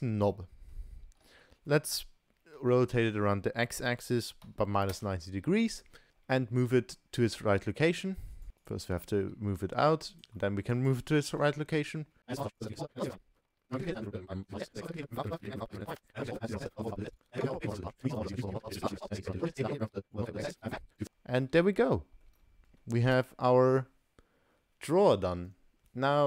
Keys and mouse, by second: 0.3-0.7 middle drag, 1.1 r, 6.1 shift+middle click, 6.7-7.0 middle drag, 8.5 g, 9.1 g, 10.4 middle click, 11.4-13.7 typing, 12.7 click, 13.3 shift+middle click, 13.5 shift+middle click, 14.6 shift+click, 14.8 shift+d, 15.2 shift+d, 16.0 shift+click, 16.6 shift+g, 16.9 click, 17.0 ctrl+s, 17.0 middle drag, 17.2 middle click, 17.5 KP_3, 17.6 shift+middle click, 17.7 click, 18.0 middle drag, 18.2 middle click, 18.9 s, 20.2 g, 20.6 middle click, 20.7 middle click, 20.8 middle click, 20.9 middle click, 21.0-21.4 middle drag, 21.7-22.0 ctrl+middle drag, 22.2 ctrl+middle click, 22.4-22.8 middle drag, 22.8 ctrl+click, 22.8 ctrl+middle click, 22.8 ctrl+right click, 23.0 ctrl+s.